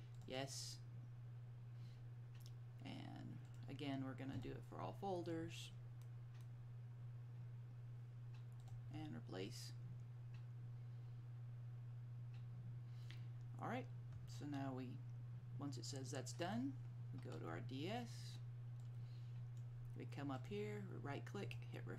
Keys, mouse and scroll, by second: 3.6 click, 8.7 click, 16.6 click, 19.0 click, 21.6 click.